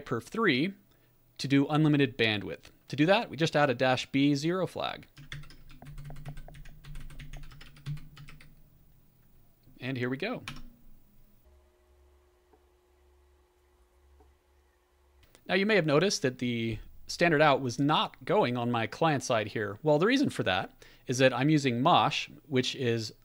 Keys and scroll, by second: 5.3 Up, 5.8 alt+b, 6.0 alt+b, 6.4 alt+b, 6.5 alt+f, 6.8 alt+b, 7.0 alt+b, 7.2 alt+f, 7.4-8.7 typing, 10.4 Return, 10.5-11.2 typing.